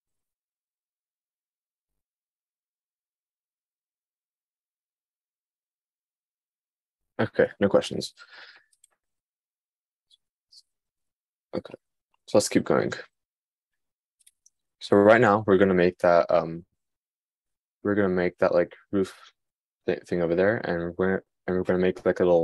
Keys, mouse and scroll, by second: 11.9-13.5 shift+middle drag.